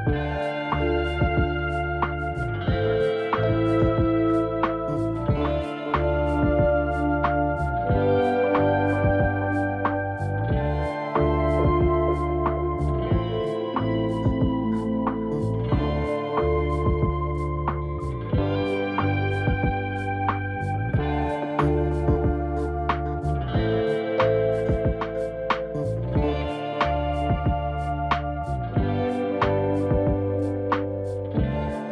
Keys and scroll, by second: 16.8 ctrl+t, 23.1 ctrl+t.